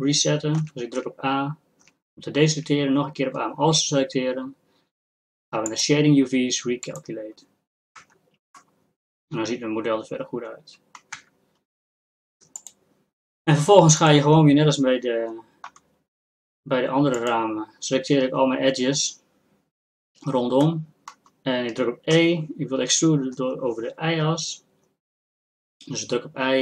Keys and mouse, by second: 0.6 a, 1.0 a, 5.7 click, 8.0 Tab, 8.0-9.8 drag, 11.1 Tab, 12.6-20.6 drag, 20.6-26.6 middle drag.